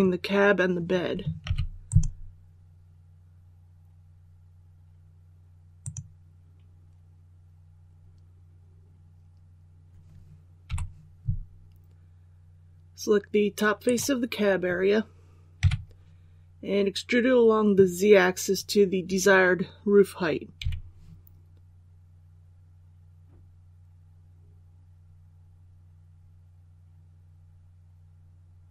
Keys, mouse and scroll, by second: 1.8 click, 10.6 3, 13.8 right click, 15.5 KP_3, 20.5 e.